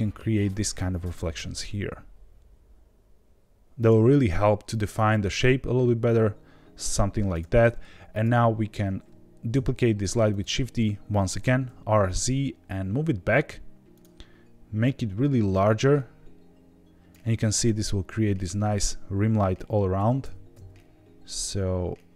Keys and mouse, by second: 1.1 r, 1.3 z, 3.7 click, 5.0 g, 5.2 z, 5.3 z, 7.3 click, 8.1 click, 9.5 shift+d, 10.2 right click, 11.3 r, 11.6 z, 13.9 click, 14.8-17.1 drag, 19.9 r, 20.2 x, 20.5 x.